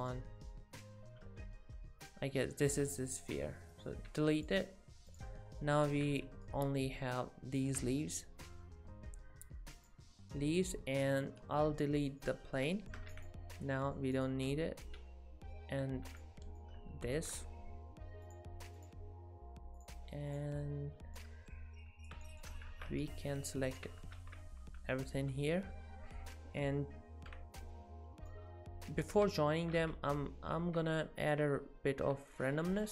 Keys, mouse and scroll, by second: 1.6 g, 4.1 x, 5.1 click, 5.9 alt+a, 6.5 ctrl+right click, 8.3 scroll up 2, 8.7 scroll down 1, 9.8 click, 10.5 click, 12.2 middle click, 12.8 shift+middle click, 13.1 x, 13.7 middle click, 14.2 click, 16.1 x, 16.6 middle click, 18.3 click, 18.8 click, 20.3 click, 21.2 middle click, 22.3 shift+middle click, 22.7 alt+a, 23.0 ctrl+right click, 24.0 z, 24.2 alt+a, 24.8 a, 25.3 z, 28.3 middle click, 29.8 z, 30.4 scroll up 1, 30.6 z, 31.0 middle click, 31.5 scroll up 1, 32.0 scroll up 2, 32.0 z, 32.5 z, 32.8 middle click.